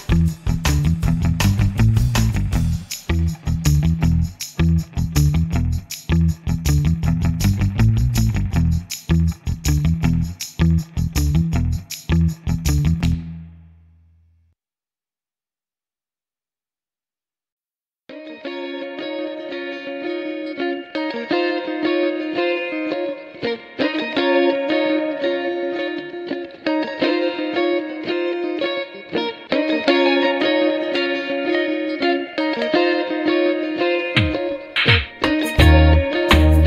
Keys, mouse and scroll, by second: 0.9 F1, 1.3 click, 1.8-2.2 scroll down 2, 3.1 KP_Subtract, 4.9 click, 6.1 ctrl+shift+click, 10.7 click, 12.3 click, 12.8 click, 13.8-17.3 drag, 17.8 click, 18.8 scroll down 2, 20.2 KP_Subtract, 21.2 KP_Add, 26.9 click, 28.5 click, 30.1 click, 33.9 click, 35.0 click.